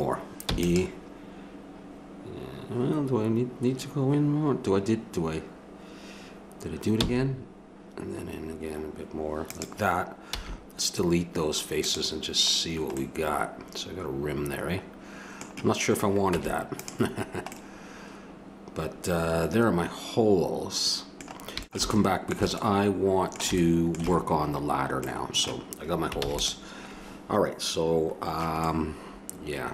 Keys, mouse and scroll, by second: 0.6 e, 7.0 e, 10.3 x, 12.5-14.1 middle drag, 14.8 middle click, 16.3 Tab, 21.7-23.8 middle drag, 25.2 middle click, 26.2 ctrl+s.